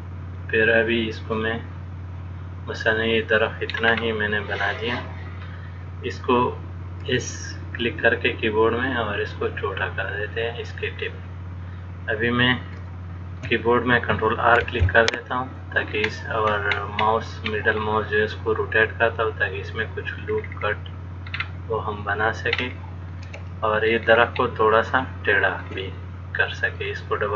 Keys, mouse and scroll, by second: 4.1 scroll up 2, 8.1 s, 13.1 shift+middle click, 14.8 ctrl+r, 20.6-21.6 scroll down 2, 21.6-21.9 scroll down 3, 23.0-23.3 scroll up 4, 23.3 click, 24.3-24.9 scroll down 5, 24.6-24.9 scroll up 1, 24.9 shift+scroll down 1, 25.1 shift+middle click, 26.7 click.